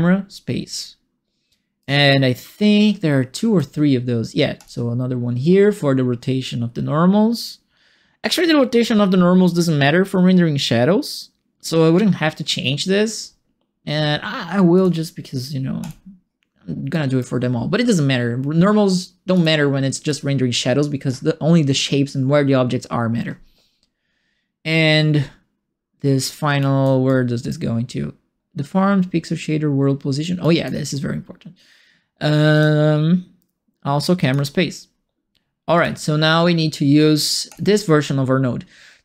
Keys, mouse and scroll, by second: 0.8 middle click, 1.5 right click, 3.3 right click, 3.8 middle click, 14.7 click, 15.8 click, 16.9 right click, 19.3 click, 20.0 click, 26.6 right click, 27.0 right click, 30.4 right click, 32.5 click, 34.2 click, 35.7 click, 37.4 click.